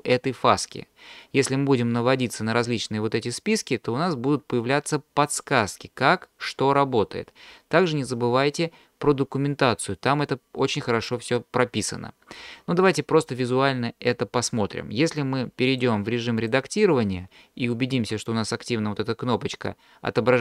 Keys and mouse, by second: 1.5-12.6 drag, 15.7-16.6 drag.